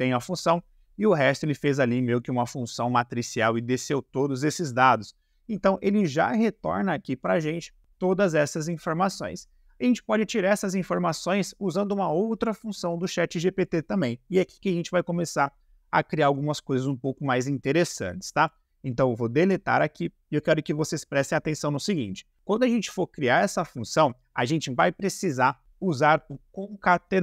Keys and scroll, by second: 19.4 Delete.